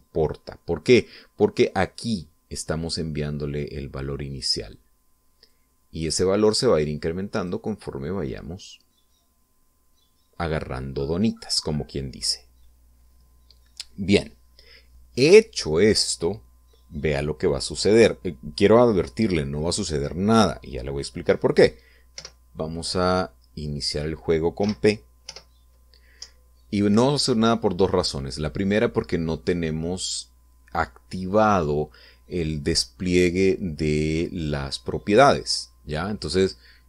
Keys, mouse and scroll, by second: 6.5-8.7 drag, 23.2 p, 26.3 p, 27.2 Up.